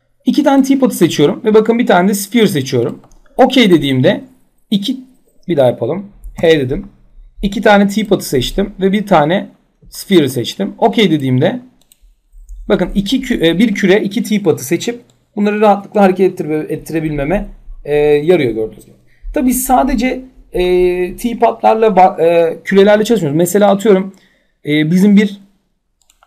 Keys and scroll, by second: 6.0 h.